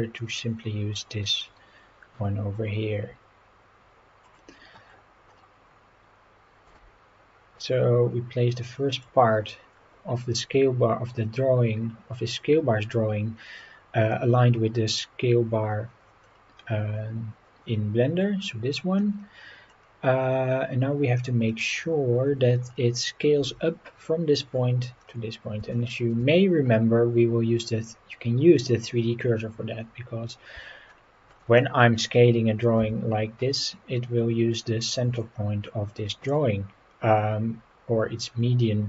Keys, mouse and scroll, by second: 4.3 click, 4.6-6.3 scroll up 10, 6.7 g, 8.9 click, 13.6-14.3 scroll down 4, 16.2 scroll down 2, 17.0 scroll up 4, 19.0 scroll down 3, 19.4 scroll up 3, 19.7 scroll down 2, 20.5-21.0 scroll up 5, 21.2-22.2 scroll down 6, 22.6-23.0 scroll up 4, 25.0-25.6 scroll down 3, 25.7 shift+middle click, 26.5-27.0 scroll up 4, 29.7-30.3 scroll down 4, 30.9-31.3 shift+middle drag, 31.6-32.0 scroll down 4, 32.8 s, 34.9 Escape, 36.3-38.8 drag.